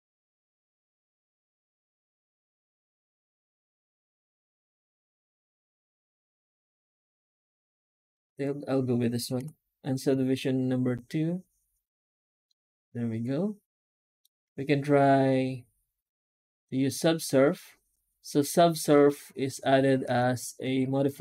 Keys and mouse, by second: 9.2 F9, 12.3-14.1 middle drag, 14.3 F9, 19.9 ctrl+space.